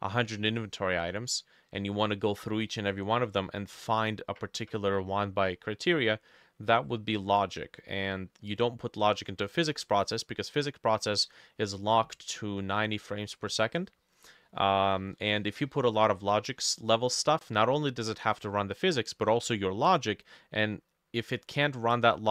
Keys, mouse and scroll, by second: 12.8 middle click, 13.7 middle click, 15.2 middle click, 16.7 middle click, 21.8 middle click.